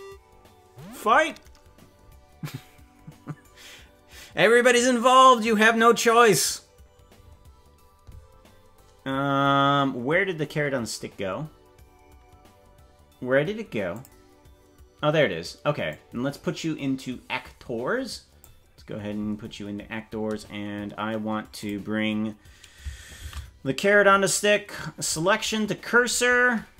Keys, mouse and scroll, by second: 13.9 click, 15.9-18.4 drag, 21.6 click, 23.2 shift+s.